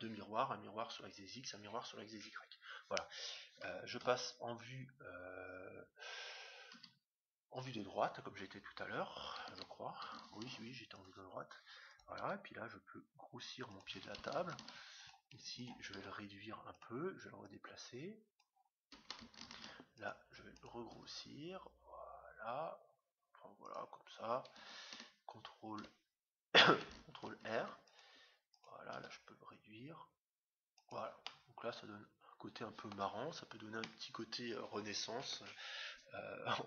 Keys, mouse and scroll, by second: 2.2-4.3 middle drag, 4.0 KP_1, 5.0-6.7 scroll down 1, 6.7-7.0 scroll down 1, 6.7 KP_3, 7.8-10.1 middle drag, 11.8 ctrl+r, 12.1 s, 14.5 ctrl+r, 15.9 s, 17.3-19.0 drag, 19.1 click, 19.4 ctrl+r, 20.9 s, 27.4 ctrl+r, 28.9 s, 31.2-33.1 middle drag, 33.8-35.4 middle drag, 35.6 middle click, 36.3-36.6 scroll down 1.